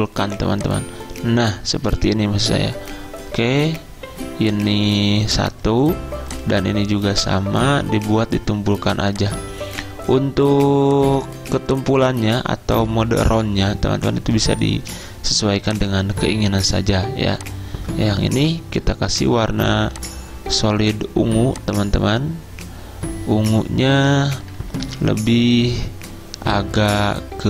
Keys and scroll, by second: 24.9 F6.